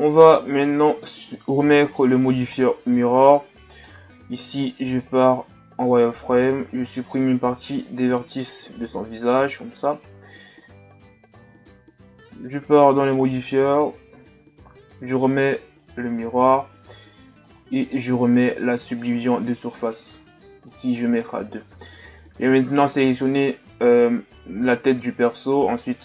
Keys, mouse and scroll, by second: 0.6-1.0 shift+scroll up 2, 1.8-2.2 ctrl+scroll down 2, 2.6-2.9 ctrl+scroll down 2, 2.9 z, 3.7 right click, 4.6 b, 8.8 x, 11.2 z, 12.2-12.5 ctrl+scroll up 3, 12.5 Tab, 15.9-16.7 drag, 17.4-17.8 drag, 19.0-21.4 drag, 21.4-22.2 shift+scroll down 1, 22.2 shift+scroll down 2, 22.4-23.7 middle drag, 23.7-24.8 scroll down 3, 24.8-25.8 shift+scroll up 3, 25.8 shift+right click.